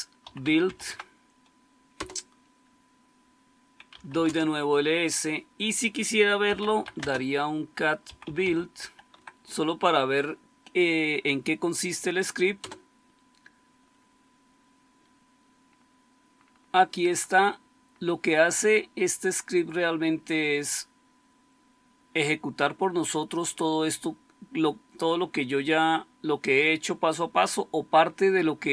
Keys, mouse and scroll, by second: 0.0-1.1 typing, 1.8 Return, 3.6-4.3 typing, 6.1-9.5 typing, 12.5 Return.